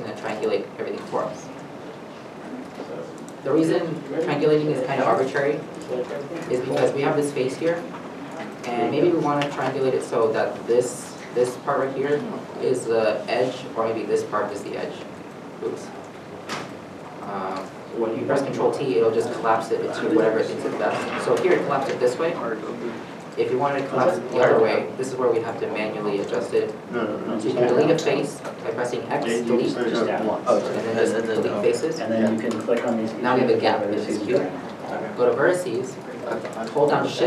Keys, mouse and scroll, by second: 3.0 ctrl+z, 3.7 3, 4.4 shift+middle click, 15.7 ctrl+z, 17.3 middle click, 18.4 ctrl+t, 19.7 middle click, 23.1 middle click, 24.9 ctrl+z, 26.3 x, 29.2 x, 29.2 x, 32.3 x, 32.3 middle click, 35.3 1.